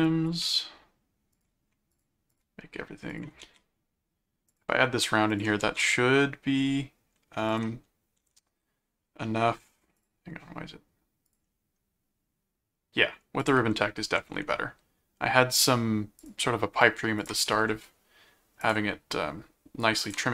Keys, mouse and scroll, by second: 0.0 click, 1.3 ctrl+click, 2.0 click, 3.1 ctrl+alt+click, 3.4 ctrl+alt+a, 4.5 ctrl+click, 5.3 ctrl+alt+click, 5.6 ctrl+alt+a, 7.5 ctrl+click, 8.2 alt+a, 10.0 click, 11.2 click, 13.4 ctrl+click, 14.2 alt+a, 16.2 ctrl+click, 17.2 ctrl+alt+click, 17.7 ctrl+alt+d, 18.6 ctrl+click, 20.0 ctrl+click.